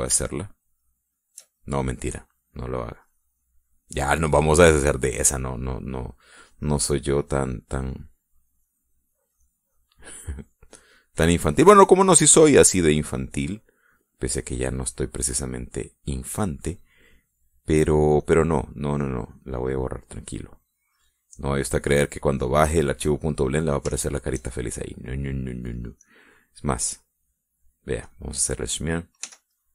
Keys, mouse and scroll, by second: 0.3 click, 1.0 middle click, 1.5 shift+middle click, 2.1-3.1 shift+middle drag, 3.3 shift+middle click, 4.1-5.4 drag, 7.2 click, 7.7-8.9 drag, 9.1 click, 10.3 click, 10.9-12.0 drag, 12.5-14.3 drag, 18.0-19.7 drag, 19.8-21.3 drag, 21.8-23.0 drag, 23.1 click, 24.2 click, 25.1 shift+middle click, 27.2 click, 29.2 click.